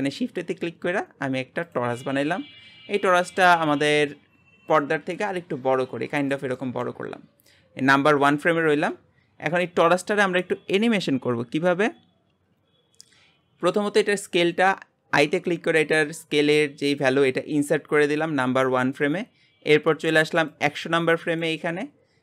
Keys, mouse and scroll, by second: 1.7 shift+a, 3.4 s, 5.1-13.6 middle drag, 13.6 i, 20.5-22.2 drag.